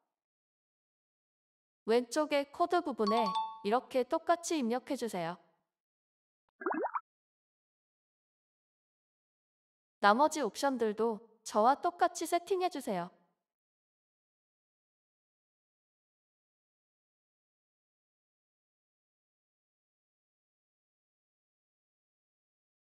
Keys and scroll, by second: 0.0-0.3 typing.